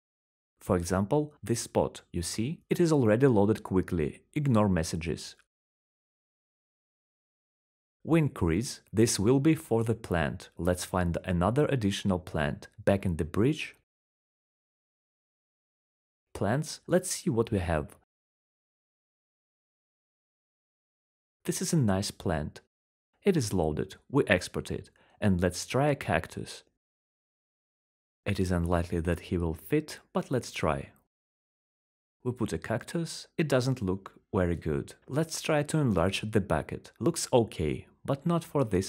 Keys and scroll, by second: 7.5-11.5 typing, 15.7-16.9 typing, 29.1-30.1 typing, 31.7-33.2 typing, 36.5-38.4 typing.